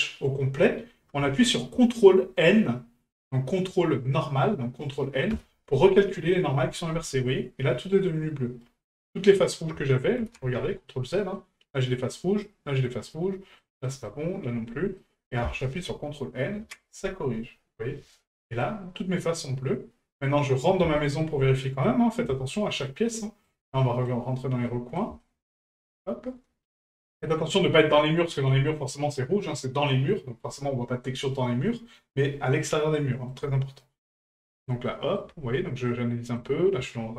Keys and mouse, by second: 7.3-8.6 middle drag, 10.9-11.3 middle drag, 12.2 middle drag, 13.1-13.6 middle drag, 13.9 middle click, 15.0-15.3 middle drag, 18.6-20.1 middle drag, 21.0 shift+middle drag, 21.8-22.3 middle drag, 22.5-22.8 shift+middle drag, 23.2 shift+middle drag, 23.8 middle drag, 24.6-25.0 middle drag, 25.2 shift+middle drag, 25.6-26.0 middle drag, 26.7 middle drag, 27.1-27.5 shift+middle drag, 27.9-28.4 middle drag, 28.5-33.3 shift+middle drag, 34.1-34.6 shift+middle drag, 34.9-35.2 shift+middle drag, 35.9-36.4 middle drag, 36.9-37.1 shift+middle drag.